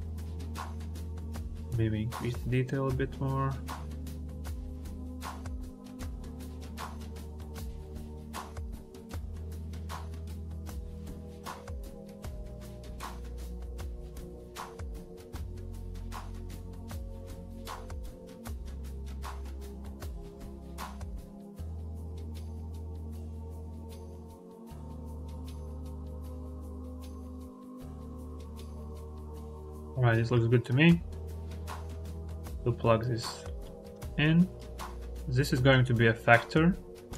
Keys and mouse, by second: 0.9-2.7 drag, 6.2 click, 7.5-9.4 drag, 9.6 click, 10.9 click, 12.5 ctrl+z, 13.0 click, 13.9 click, 14.4 click, 15.7 ctrl+z, 15.9 ctrl+z, 16.8 click, 18.0-18.7 drag, 18.9 middle click, 19.0 click, 20.9 click, 21.8-23.3 drag, 23.6 ctrl+z, 24.6-26.2 drag, 26.5 ctrl+z, 27.1 click, 28.7 click, 29.8 click, 31.1 click, 32.2 click, 32.6 click, 33.4 click, 33.9 click, 35.5-37.1 drag.